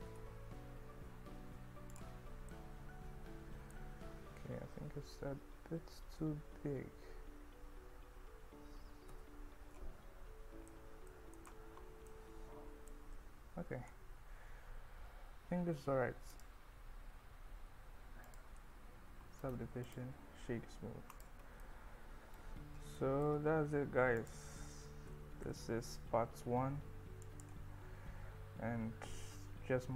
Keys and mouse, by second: 0.1 Tab, 1.9 click, 2.5-3.8 middle drag, 4.0 KP_1, 4.9 Tab, 5.8 s, 9.7 Tab, 10.7-11.1 middle drag, 11.4 middle click, 12.1-13.0 middle drag, 13.0 KP_1, 16.3-18.6 drag, 21.2 click, 21.6-22.4 middle drag, 23.0 middle drag, 23.3 KP_1, 24.2 click, 25.1 g, 25.5 z, 25.8 x, 27.3 click.